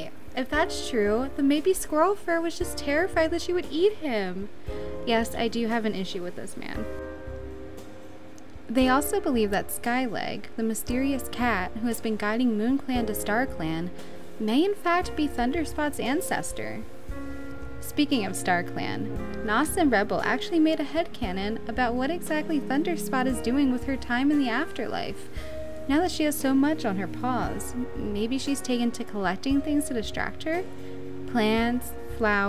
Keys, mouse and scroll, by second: 1.6 right click, 7.3 right click, 8.0 right click, 11.3 right click, 13.6 right click, 15.6 right click, 17.9 right click, 19.1 right click, 20.4 right click, 25.2 right click.